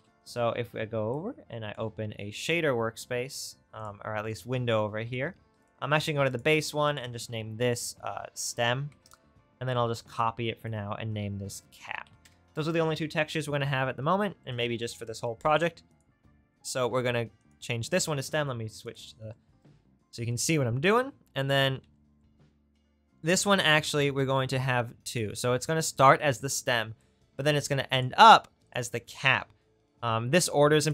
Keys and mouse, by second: 0.0 n, 1.2-3.0 middle drag, 13.7-14.8 middle drag, 18.9-20.8 middle drag, 20.8 right click, 24.3-25.3 right drag.